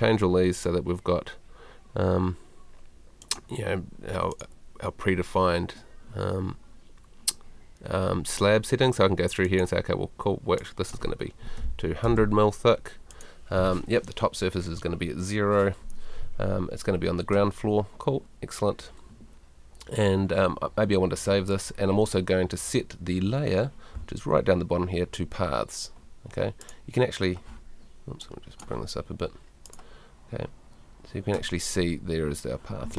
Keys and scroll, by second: 11.5 2, 12.0 0.